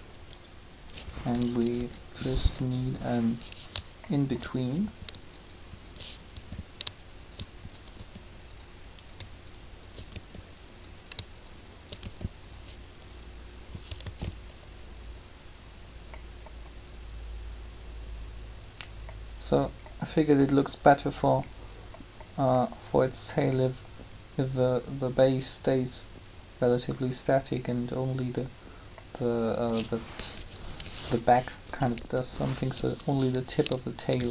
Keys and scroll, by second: 1.5 Up, 6.3 shift+r, 7.9 r, 11.3 shift+r, 12.0 shift+r, 14.0 alt+a, 30.2 3.